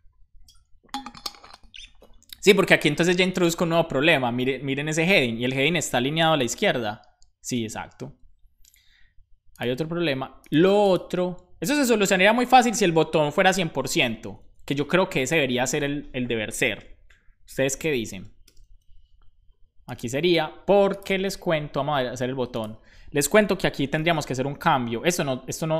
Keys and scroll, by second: 14.1 shift+super+Left, 17.8 BackSpace, 18.5 super+s, 23.6-24.7 typing.